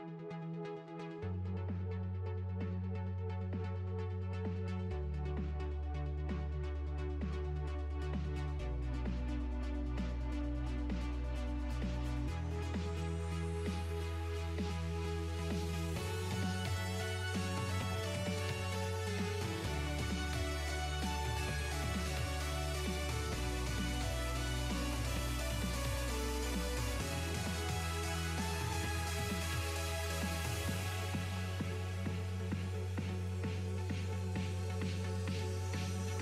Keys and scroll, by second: 24.7 s, 25.8 s.